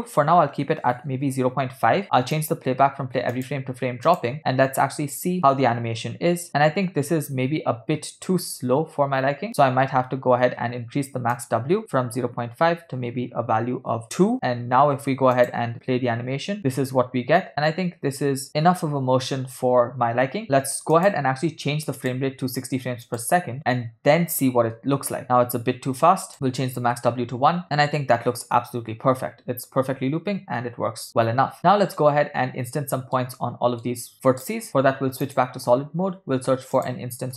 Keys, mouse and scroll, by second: 2.4-4.4 drag, 4.9 space, 10.8 space, 11.4-14.0 drag, 15.6 click, 16.1 space, 20.4 space, 21.0 click, 22.0-23.3 drag, 25.0 space, 25.8 space, 26.3 click, 26.4 0, 27.1 space, 31.1 space, 31.6 middle click, 33.0 ctrl+middle click, 33.4 middle click, 34.2 click, 35.4 click, 36.2 shift+a.